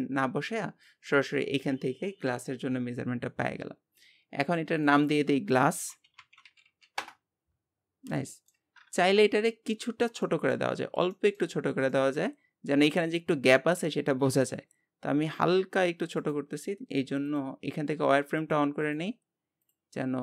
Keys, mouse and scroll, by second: 4.8-6.6 drag, 6.6 s, 8.0 scroll down 1, 8.3 shift+middle click, 9.0 KP_7, 9.7-10.8 scroll up 4, 10.2 shift+middle click, 11.1 shift+middle click, 11.6 scroll up 1, 11.9 shift+middle click, 12.4-12.9 scroll up 2, 14.3 s, 17.3-20.2 drag.